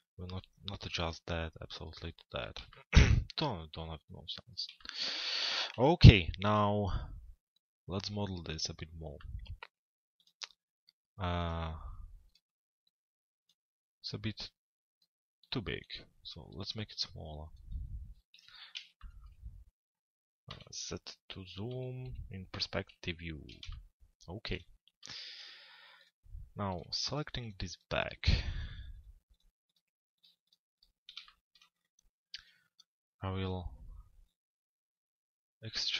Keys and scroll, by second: 5.4 f, 6.0 z, 18.1 p, 20.5 t, 21.7 z, 22.0 p, 22.9 z.